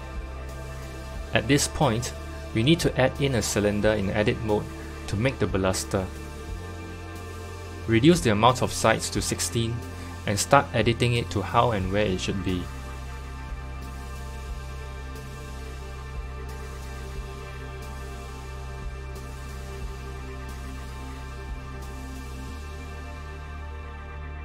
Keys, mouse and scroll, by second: 3.5 click, 4.2 Tab, 6.8 shift+a, 13.4 click, 15.1 l, 17.8 KP_7, 18.8 g, 20.0 g, 21.0 scroll up 2, 21.4 s, 22.7 s.